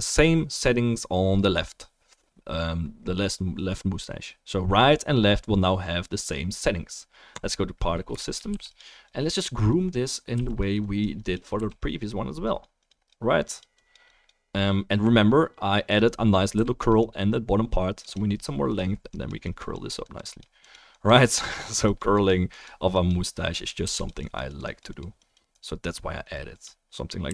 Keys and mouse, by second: 8.5 f, 8.7-9.1 drag, 9.1-9.9 middle drag, 10.3 f, 10.6 drag, 11.5 f, 11.8-12.5 drag, 16.5 f, 16.8 click, 23.8 f, 24.0 drag, 27.2 f.